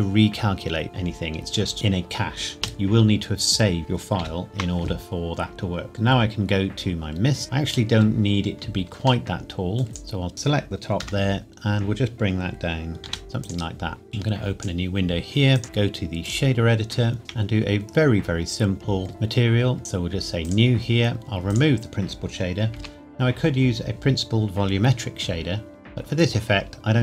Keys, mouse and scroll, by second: 2.6 space, 3.8 click, 4.2 ctrl+s, 5.9 click, 6.5-7.3 scroll down 1, 9.3 middle click, 9.8 scroll down 1, 9.9 Tab, 11.0 KP_0, 13.1 g, 13.2 z, 13.4 click, 17.2 n, 17.9-19.1 scroll up 1, 19.1 click, 20.4 click, 21.2-21.5 scroll up 1, 21.5 click, 22.8 Delete.